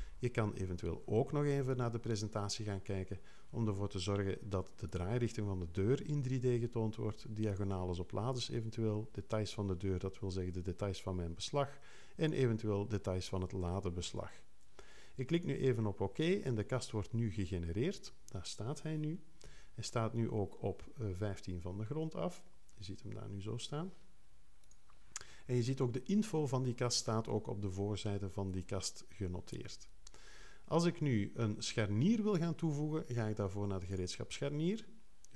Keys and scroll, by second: 19.4 2, 21.8 3.